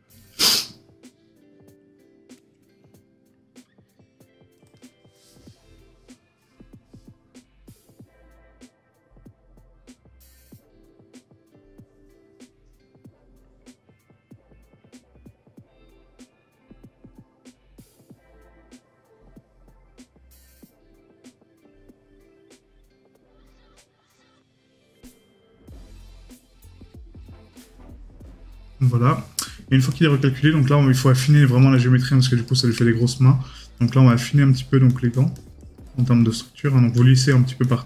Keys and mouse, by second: 32.4 right click.